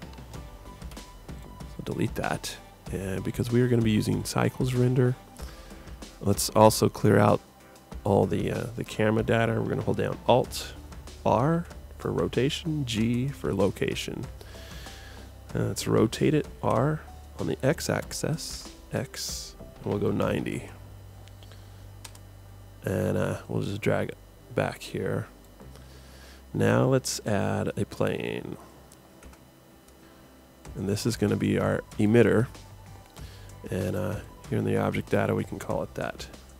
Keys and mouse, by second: 0.9 x, 3.3-6.0 drag, 11.5 alt+r, 13.0 alt+g, 16.6 r, 23.4 click, 24.0 click, 29.1 shift+a, 34.2-36.5 drag.